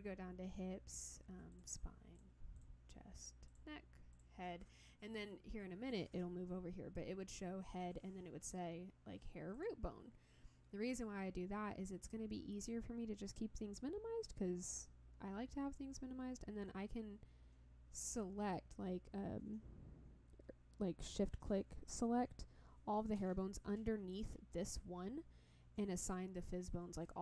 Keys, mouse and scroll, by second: 1.5 click, 2.1 click, 2.5 click, 3.5 click, 4.1 click, 9.5 click, 24.1 click.